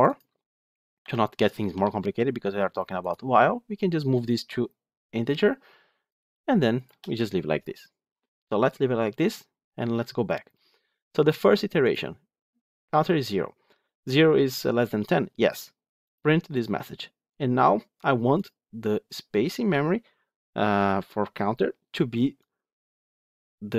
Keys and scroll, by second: 11.8 ctrl+F8.